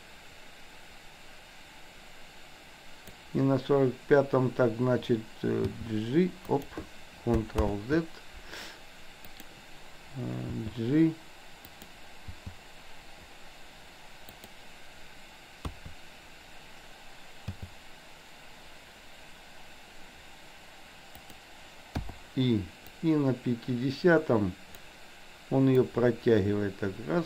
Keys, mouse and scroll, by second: 5.7 g, 7.7 ctrl+z, 9.3 click, 10.6 g, 12.3 g, 15.7 KP_3, 17.6 g, 22.1 i, 23.1-25.0 drag, 25.8-27.2 drag.